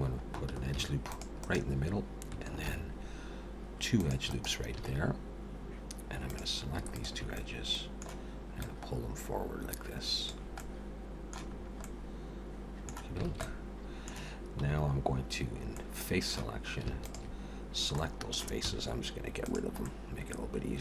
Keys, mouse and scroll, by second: 0.6 ctrl+r, 2.6 ctrl+r, 4.8 alt+a, 6.2 click, 6.9 shift+click, 7.3 middle click, 8.6 click, 10.6 middle click, 11.5-12.0 scroll up 3, 11.8 middle click, 13.3 alt+a, 13.4 middle click, 14.6 3, 15.5 scroll up 1, 15.7 middle click, 17.0 alt+shift+click, 18.0 middle click, 18.6 x, 19.8 middle click.